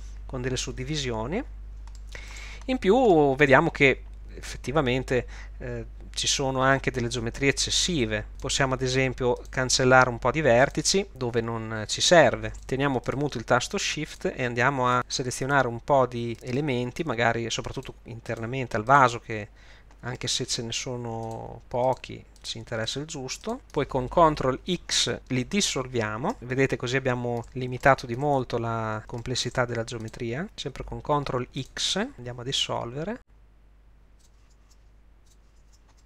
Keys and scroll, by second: 26.0 ctrl+x, 30.4 ctrl+x, 32.1 ctrl+x, 34.6 ctrl+x, 35.6 ctrl+x.